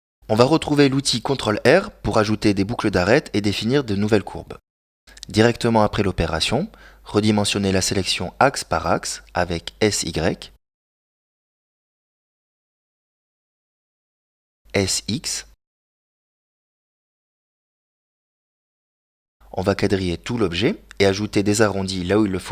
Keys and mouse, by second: 1.7 middle click, 3.7 ctrl+r, 8.1 middle click, 9.4 s, 12.5-14.7 middle drag, 14.9 s, 17.9-19.1 middle drag, 19.9 middle click, 21.8 ctrl+r.